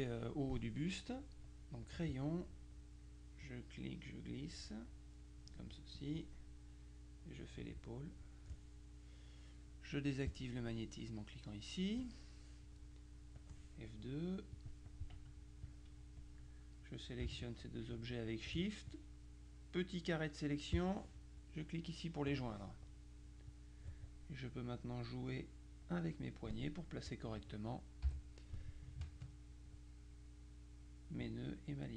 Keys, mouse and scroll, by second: 1.9 click, 3.5-6.0 drag, 7.3-8.7 drag, 10.3 click, 13.5 click, 14.7 click, 15.7 click, 17.5 shift+click, 19.0-21.2 drag, 22.3 click, 23.5 click, 24.7 click, 25.5 click, 27.2 click, 28.2 Delete, 29.2 ctrl+click, 31.6 click.